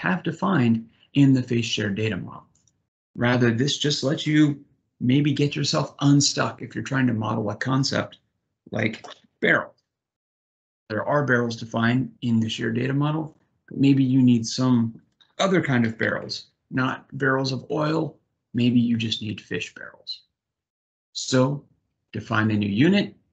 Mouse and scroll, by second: 3.1 click, 21.5 click.